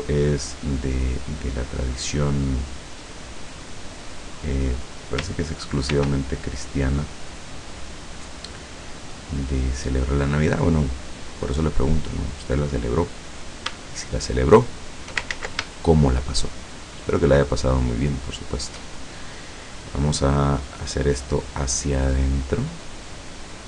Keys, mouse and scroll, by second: 0.1 click, 4.4 click, 5.9 ctrl+r, 6.9 click, 8.5 click, 9.2-10.2 middle drag, 12.1 click, 13.3 right click, 14.5 shift+right click, 15.4 ctrl+shift+z, 15.8 ctrl+shift+right click, 17.4 shift+right click, 18.3 shift+right click, 19.6-21.0 middle drag, 21.7-23.6 drag.